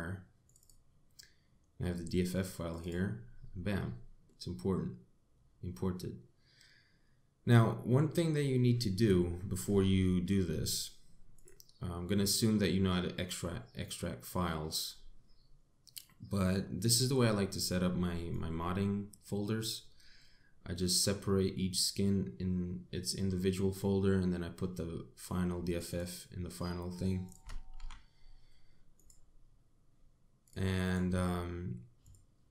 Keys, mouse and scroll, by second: 3.5-3.9 scroll up 3, 4.1 middle click, 9.8 middle click.